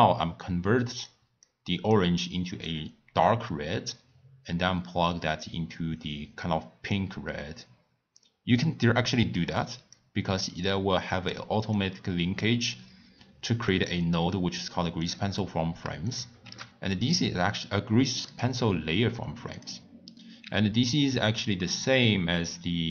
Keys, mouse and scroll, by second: 1.4 click, 2.6-5.8 drag, 10.6 click, 11.7 click, 13.7 click, 14.3-16.2 drag, 16.4 shift+a, 19.5 click, 20.4 shift+a.